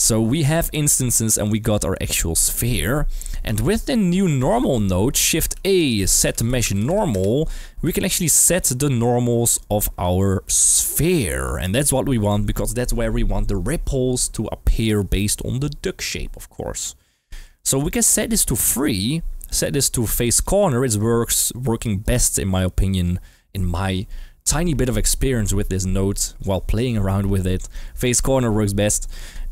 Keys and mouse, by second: 2.9 shift+middle drag, 4.1 click, 4.7 middle click, 5.7 shift+a, 9.5 click, 10.6 g, 11.3 click, 18.0-18.8 drag, 19.5-20.4 drag, 20.9-21.6 drag, 22.0-23.0 drag, 29.0 click.